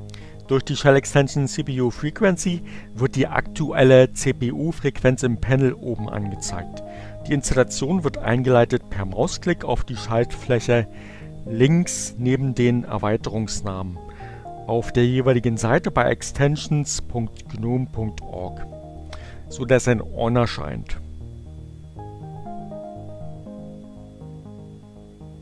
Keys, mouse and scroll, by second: 18.0 click.